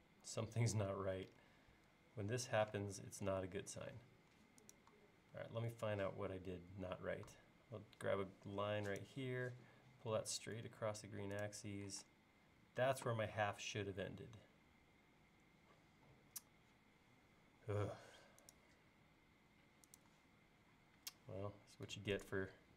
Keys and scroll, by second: 2.8 space, 5.4 l, 12.0 space, 17.5 l.